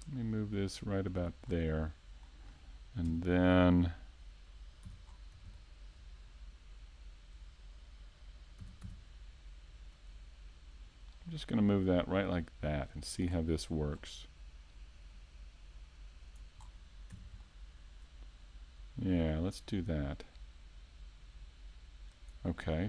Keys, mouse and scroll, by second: 1.5 click, 6.8 KP_5, 7.2 middle click, 8.2 a, 8.5-8.8 scroll down 3, 8.8 middle click, 9.2 scroll up 1, 10.0-10.6 scroll up 3, 10.6 right click, 10.8 middle click, 11.6 shift+middle click, 12.8 click, 17.5 middle click, 18.9 Tab, 19.5 right click, 20.3 click.